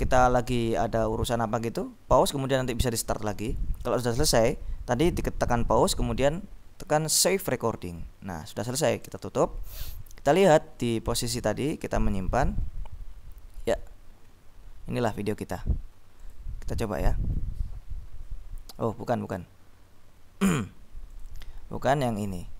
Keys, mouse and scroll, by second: 7.3 click, 9.3 click, 10.0-10.9 scroll up 2, 10.9 scroll up 1, 11.3 click, 12.2-14.9 scroll down 2, 16.2 click, 21.2 click, 22.3 click.